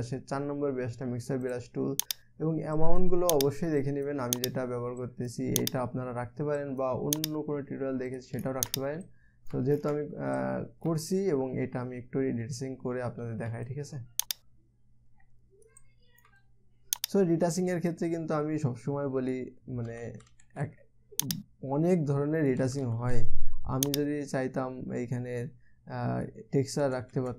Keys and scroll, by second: 20.5 [, 20.6 [, 20.9 [, 21.0 [, 23.2 ], 23.4 ], 23.5 ].